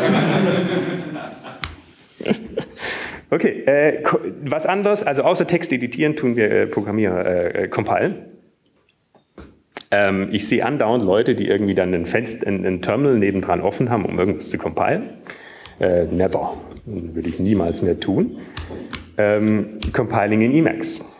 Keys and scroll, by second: 6.9 Up, 6.9 Down, 20.8 ctrl+x, 20.8 ctrl+f, 20.8 BackSpace.